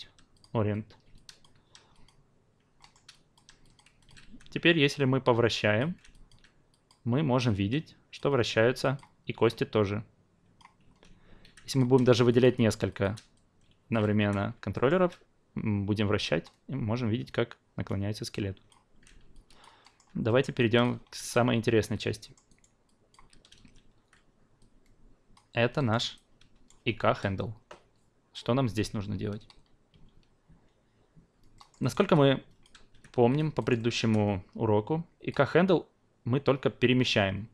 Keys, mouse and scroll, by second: 1.1 alt+click, 1.9 click, 2.8 alt+middle click, 3.1 alt+click, 3.6 drag, 4.0 alt+click, 4.2 e, 4.9-5.8 drag, 5.9 ctrl+z, 6.1 alt+drag, 6.7 drag, 7.4-8.2 drag, 8.4 ctrl+z, 8.8 drag, 9.5-10.6 drag, 10.8 ctrl+z, 11.4 q, 11.6-12.0 drag, 12.3-13.1 shift+drag, 13.3 alt+click, 14.2 e, 14.7 alt+middle click, 15.9-18.7 drag, 18.9 ctrl+z, 19.3 alt+drag, 19.8 alt+middle click, 20.2 alt+middle drag, 20.6 alt+drag, 21.2 click, 22.2 alt+middle drag, 22.5 alt+right drag, 22.8 alt+click, 23.5 ctrl+a, 24.6-25.3 drag, 25.7 alt+middle drag, 26.1-26.7 alt+right drag, 31.5 alt+middle drag, 31.8 alt+right click, 32.0-33.3 alt+drag, 33.6 alt+right click, 33.8 alt+middle click, 35.3-37.5 drag.